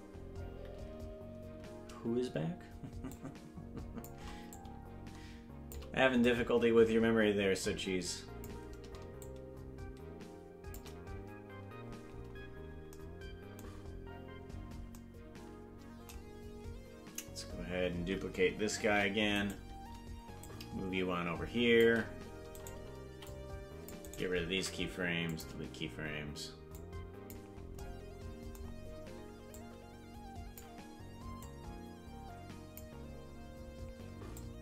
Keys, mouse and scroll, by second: 3.1-4.1 shift+drag, 4.5-5.8 shift+drag, 6.3-8.5 drag, 9.2-10.8 shift+drag, 12.4-12.7 scroll down 3, 13.7-14.2 scroll up 3, 14.6 scroll down 1, 18.9 shift+d, 20.4-21.8 shift+drag, 22.5 right click, 23.1 c, 24.5 Delete, 26.8 click, 29.5-30.6 drag, 31.4-32.8 drag, 34.3-34.6 drag.